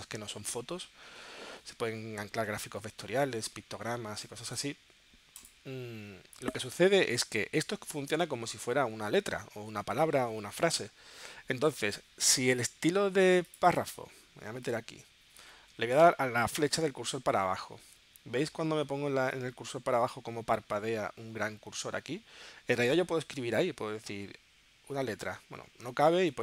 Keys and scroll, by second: 16.7 Down, 17.8 Up, 18.2 Down, 24.1 a, 26.2 super+z.